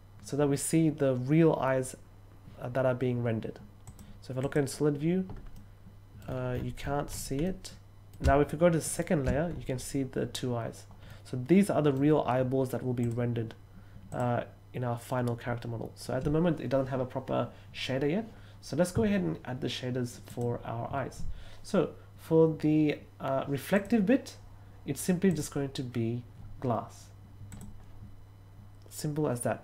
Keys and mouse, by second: 3.8 click, 4.3 click, 5.5-6.1 middle drag, 7.4-8.0 middle drag, 8.8 shift+click, 11.0-11.9 middle drag, 13.0 click, 14.0 click, 20.2 click, 23.7 click, 25.2 click, 27.4 click.